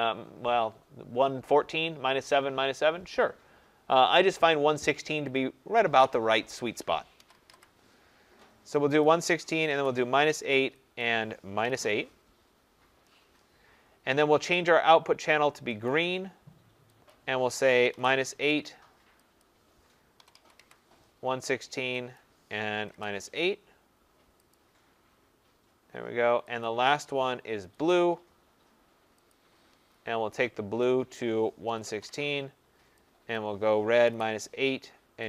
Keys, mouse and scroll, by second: 5.7 click, 6.9-7.9 typing, 9.0 click, 9.3-10.0 typing, 10.9 click, 11.5 typing, 13.4 8, 14.6 click, 15.8 click, 17.0 click, 17.6-18.4 typing, 19.3 click, 20.2-20.5 typing, 22.1 click, 22.6-23.4 typing, 24.5 click, 26.6 click, 27.8 click, 31.4-32.4 typing, 33.3 click, 33.8-34.5 typing.